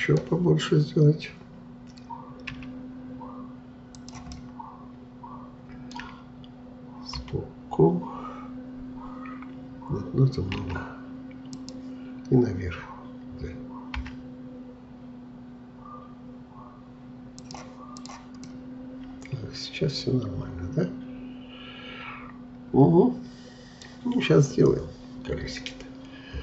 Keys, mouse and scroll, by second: 2.5 s, 4.3-7.2 middle drag, 7.2 KP_3, 10.6 s, 14.0 g, 18.0 click, 18.4-21.5 middle drag.